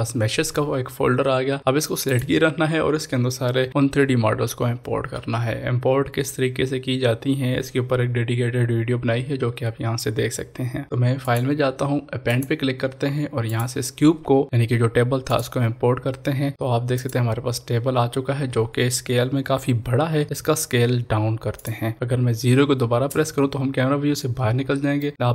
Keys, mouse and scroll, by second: 2.2 click, 11.2 click, 11.3 click, 15.3 click, 20.2 click, 21.7 click, 23.9 scroll down 1, 24.9 middle click, 25.0-25.3 middle drag.